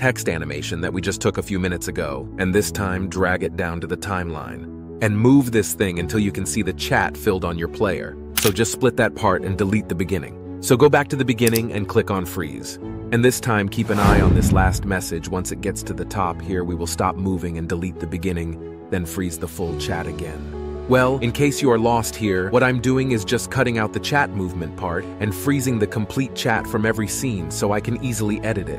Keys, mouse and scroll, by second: 8.3 ctrl+b, 9.0 Delete, 17.5 ctrl+b, 18.1 Delete, 25.2 ctrl+b, 25.2 Delete.